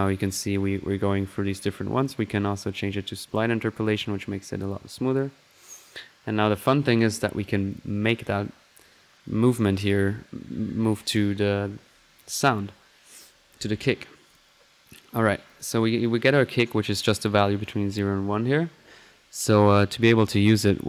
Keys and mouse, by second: 0.5 typing, 2.0-7.0 drag, 6.7 typing, 7.7 click, 9.2-10.1 drag, 10.4-10.9 middle drag, 10.9 click, 12.2 click, 14.3 click, 15.5 click, 18.0 typing, 20.8 click.